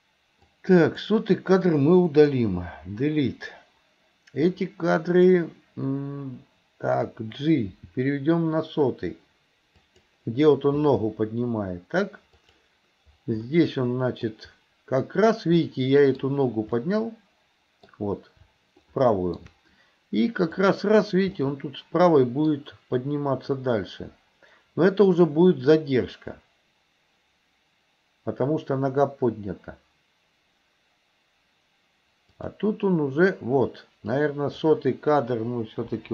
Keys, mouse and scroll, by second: 0.5 click, 2.4 Delete, 4.5 click, 7.8 g, 12.5 click, 13.5 middle click, 15.7-16.3 middle drag, 16.9-18.0 middle drag, 18.9 shift+middle click, 20.7 click, 21.4 middle click, 32.4 click, 34.1-34.7 drag, 36.0 Delete.